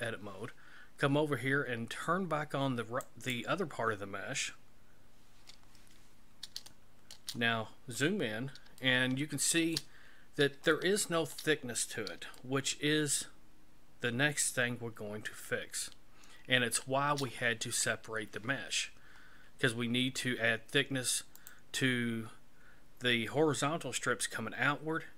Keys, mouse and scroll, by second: 3.1 click, 6.7 shift+middle click, 7.7-8.5 scroll up 7, 8.8 shift+middle click, 10.2 scroll up 3, 10.8 shift+middle click, 11.8 scroll up 4, 12.4 shift+middle click, 21.4 right click.